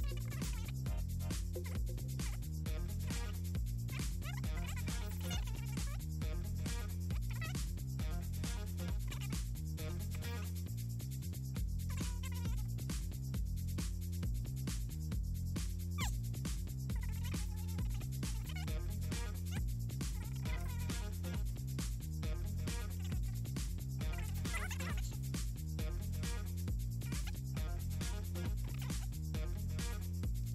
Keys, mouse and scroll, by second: 0.1 click, 0.7 Down, 1.3 Down, 2.0 Delete, 2.4 click, 2.7 Up, 3.3 click, 4.3 click, 4.7 click, 5.9 click, 7.2 ctrl+c, 7.6-9.0 drag, 10.6 Left, 10.9 Left, 11.3 Right, 11.7 click, 12.7 click, 14.0 shift+click, 14.3 click, 15.1 click, 15.5 click, 16.2 Up, 18.4 click, 18.9 ctrl+scroll up 2, 19.3 click, 19.9 middle click, 21.8 click, 22.7 click, 23.7 alt+Down, 25.6 click, 26.4 click, 27.7 click, 28.0 click, 28.9 click, 29.3 click, 29.5 click, 29.9-30.5 typing.